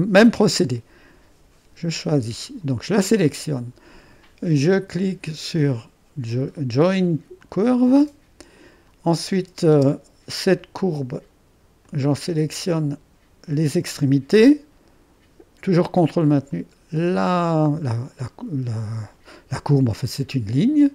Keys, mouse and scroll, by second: 2.2-5.5 drag, 7.4-9.7 drag, 9.7 space, 11.9-13.5 drag, 13.7-14.7 ctrl+drag, 16.3 click.